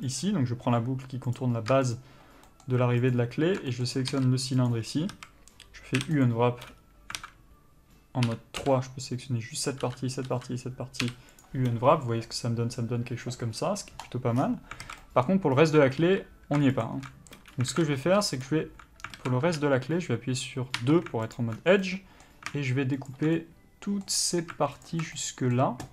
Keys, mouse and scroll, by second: 2.2 shift+click, 2.7 shift+middle click, 3.4 alt+shift+click, 4.0 middle click, 5.0 ctrl+e, 5.4 a, 6.5 u, 7.5 alt+a, 8.5 3, 8.9 l, 11.7 u, 14.7-15.1 scroll down 1, 15.1 alt+a, 15.3 middle click, 15.8 scroll up 1, 17.1 alt+shift+click, 18.0 alt+a, 18.7 click, 19.5 alt+a, 21.0 2, 21.6 alt+click, 21.8 scroll down 1, 22.1 middle click, 23.4 alt+shift+click, 23.7 middle click, 24.5-25.2 scroll up 1, 25.2 alt+shift+click, 25.4 middle click.